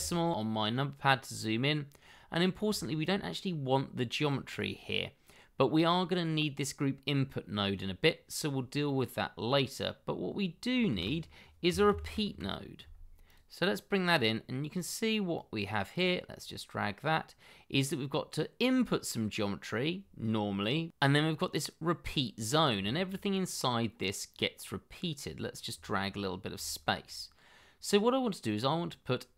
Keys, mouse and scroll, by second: 1.9-2.6 scroll down 1, 2.7 ctrl+right click, 10.9 shift+a, 11.6 r, 11.8 e, 22.5 scroll down 1, 22.8 shift+middle click, 25.8 shift+middle click, 26.1 scroll up 1, 26.6 shift+middle click.